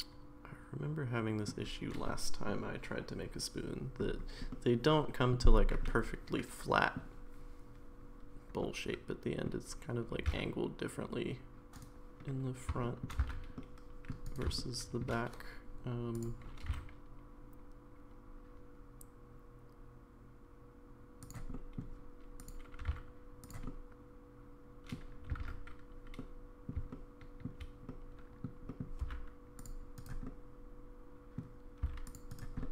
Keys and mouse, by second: 4.5 middle click, 5.9-7.0 middle drag, 8.6 middle click, 10.2 g, 12.8 middle click, 13.2 c, 14.5 middle click, 16.1 click, 16.6 g, 21.5 middle click, 22.4 click, 22.8 g, 23.7-24.9 middle drag, 25.4 ctrl+z, 26.2 middle click, 26.9 shift+middle click, 27.9 middle click, 28.7 middle click, 29.0 c, 30.3-31.4 middle drag, 31.8 c, 32.6 middle click.